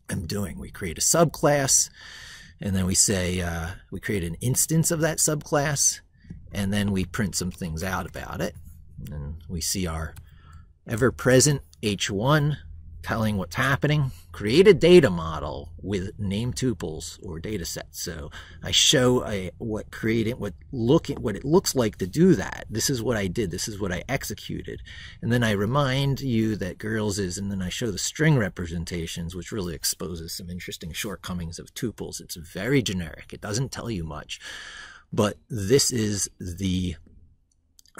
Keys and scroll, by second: 10.7 ctrl+b.